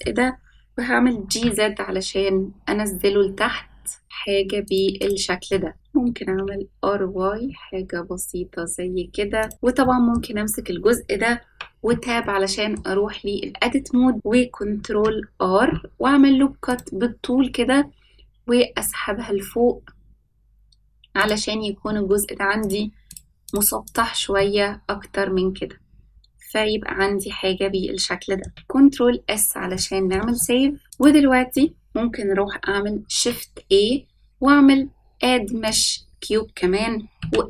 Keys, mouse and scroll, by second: 1.0 g, 4.9 click, 5.5 middle drag, 5.7 click, 6.0 r, 9.5 click, 9.8-10.1 shift+middle drag, 11.4 Tab, 12.2 middle click, 14.6 ctrl+r, 22.6-23.5 drag, 23.8 click, 24.3-28.4 middle drag, 28.5 ctrl+s, 28.5-29.6 scroll up 3, 29.7 shift+middle click, 30.3-30.8 middle drag, 30.8 click, 33.0 shift+a, 37.1 s.